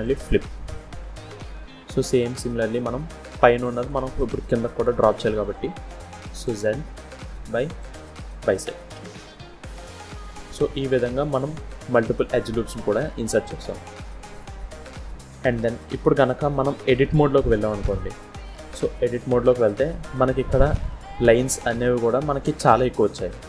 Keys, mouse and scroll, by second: 1.8 scroll down 1, 2.0 middle click, 3.5 click, 4.1 click, 5.1 middle click, 6.3 click, 7.7 click, 9.0 scroll down 1, 9.2 middle click, 11.3 click, 12.1 click, 13.5 scroll down 2, 14.2 click, 15.3 click, 15.8 middle click, 17.0-17.3 scroll up 1, 17.3 middle click, 18.5 Tab, 19.5 middle click, 21.3 middle click, 22.8 middle click.